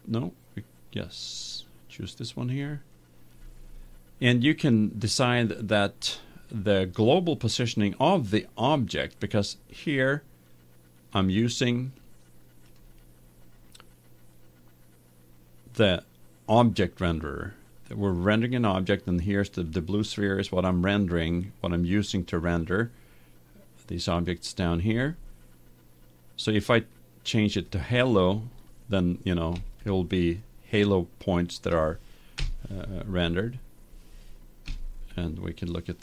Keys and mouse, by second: 2.7-4.5 drag, 12.9-14.7 drag, 20.1-22.1 right drag, 22.2-24.1 right drag, 27.5-29.1 drag, 29.1-31.8 middle drag, 32.3 KP_1, 34.6 KP_0.